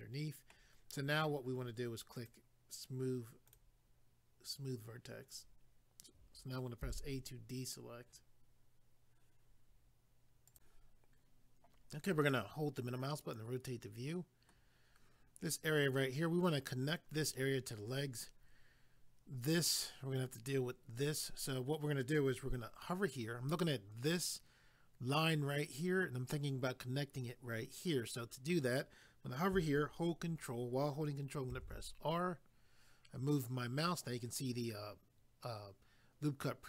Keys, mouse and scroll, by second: 2.1 click, 2.3 click, 3.5 click, 4.8 click, 6.8 a, 10.5 click, 10.6 click, 12.3 middle click, 31.5 ctrl+r.